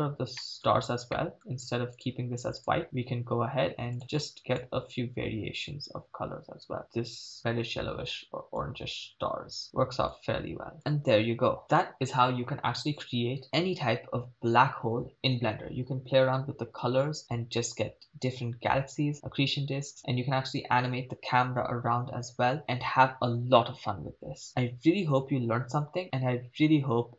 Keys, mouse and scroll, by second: 0.4 middle click, 0.7-1.1 scroll up 2, 1.1 middle click, 1.4-1.9 scroll up 2, 1.9 click, 2.6 click, 3.2-3.8 scroll down 4, 3.9 click, 10.1-10.8 drag, 13.5 shift+space.